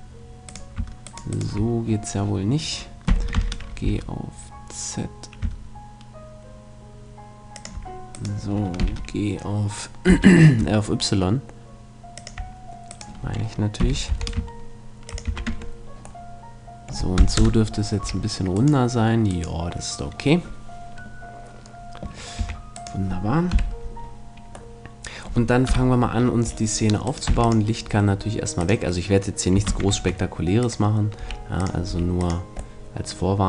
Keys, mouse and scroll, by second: 0.5-3.1 right drag, 3.1 g, 7.7-9.5 drag, 8.1-10.0 right drag, 8.8 g, 12.3-14.2 drag, 12.9-14.7 right drag, 13.8 g, 15.2-16.9 drag, 15.3 a, 15.5 Tab, 17.4 KP_0, 18.0 a, 18.6-21.2 right drag, 22.4 a, 22.9-24.6 right drag, 23.5 KP_Decimal, 25.7 KP_7, 27.1 right click, 27.3 x, 27.9 middle click, 28.6-29.1 scroll down 1, 29.7 shift+c, 29.9 shift+a, 31.2 s, 31.7 click, 31.9 s, 32.6 middle click, 33.1-33.4 drag.